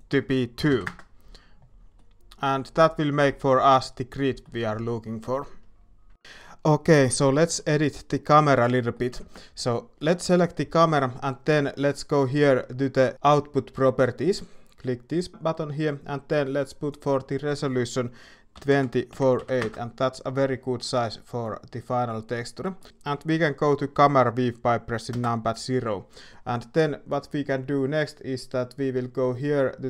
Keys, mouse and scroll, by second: 0.0-1.3 drag, 1.9-2.4 middle drag, 3.1-4.4 middle drag, 7.4 middle click, 8.3 middle click, 8.9 middle click, 22.9 middle click, 25.1 KP_0.